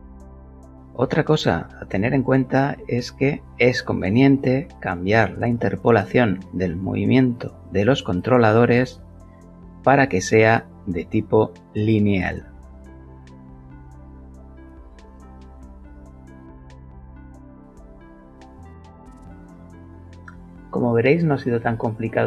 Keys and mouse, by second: 2.8 click, 3.3 click, 7.2 a, 8.1 middle click, 9.0 shift+middle click, 9.6 shift+middle click, 9.8 shift+middle click, 10.1 shift+middle click, 11.1 a, 13.0 t, 16.7 click.